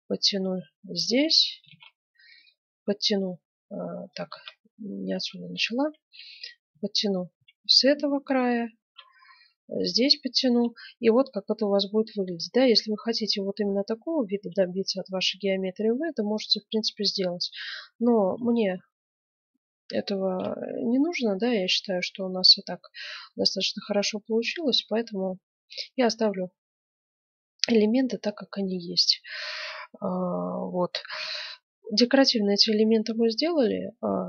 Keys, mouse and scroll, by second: 1.7 ctrl+r, 4.3 ctrl+z, 6.0 ctrl+r, 8.8 ctrl+r, 9.9 right click, 10.3 Tab, 10.7 right click, 12.0-13.7 middle drag, 13.8 middle click, 14.2 Tab, 18.4 ctrl+z, 18.7 ctrl+z, 19.4 ctrl+z, 20.0 ctrl+z, 21.1 middle click, 21.4 Tab, 21.7 middle click, 22.3 middle click, 22.7 middle click, 24.2 middle click, 26.3-28.5 middle drag, 31.0 KP_1, 31.5-33.6 middle drag.